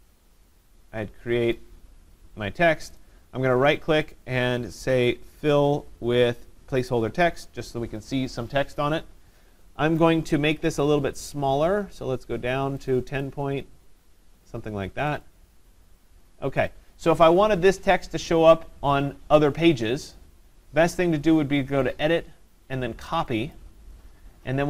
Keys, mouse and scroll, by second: 1.5 click, 3.0 right click, 6.9 click, 9.7 click, 10.7 ctrl+a, 12.9 click, 13.3 click, 15.3 click, 16.7 click, 22.0 click, 23.6 click.